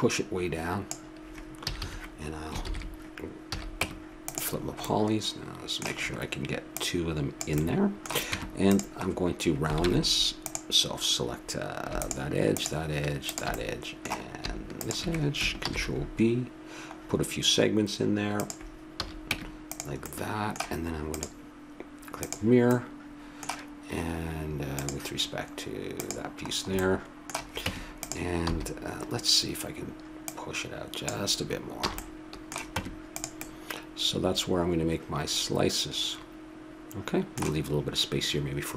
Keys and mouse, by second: 1.6 a, 1.8 a, 2.6 ctrl+n, 3.5 a, 3.8 Tab, 4.6 middle click, 6.6 middle click, 6.8 click, 7.8 middle click, 8.3 Tab, 9.0 middle click, 9.9 ctrl+Tab, 12.0-15.6 drag, 15.6 ctrl+b, 19.0 a, 19.3 Tab, 20.1 middle click, 21.1-22.8 drag, 22.8-24.7 middle drag, 24.7-26.5 drag, 26.5 middle click, 27.6 Tab, 28.4 a, 30.3-32.1 drag, 31.9 a, 32.1 middle click, 32.7 Tab, 36.5 middle click, 37.2 middle click.